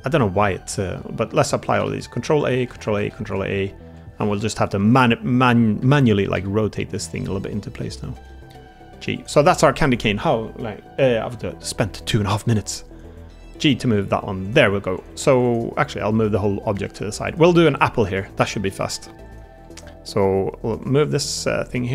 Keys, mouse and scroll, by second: 1.8 ctrl+a, 3.7 ctrl+a, 3.7 Tab, 4.4 KP_1, 5.7 a, 6.2 r, 8.2 g, 9.7 r, 11.8 Tab, 13.2 g, 14.6 Tab, 14.8 click, 15.2 Tab, 16.0 g, 17.4 Tab, 17.5 middle click, 17.9 click, 18.2 shift+click, 18.6 click, 19.4 Tab, 21.4 Tab, 21.4 click.